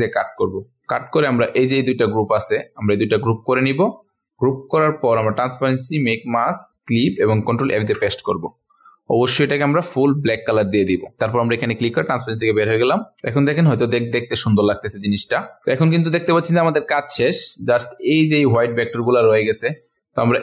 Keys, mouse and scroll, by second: 0.9 click, 3.1 ctrl+z, 5.9 click, 7.7 ctrl+f, 10.1 click, 13.3 ctrl+alt+scroll up 1, 14.4-14.9 ctrl+alt+scroll up 1.